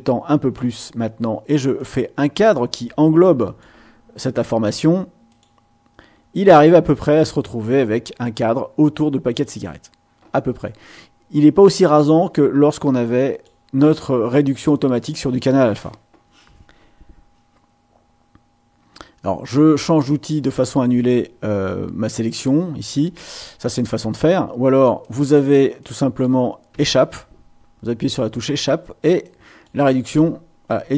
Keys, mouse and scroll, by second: 1.7-3.8 drag, 5.3 click, 12.3-13.6 drag, 19.7 click, 25.0 click, 25.8 click, 26.7 Escape, 29.2 click, 30.1 Escape.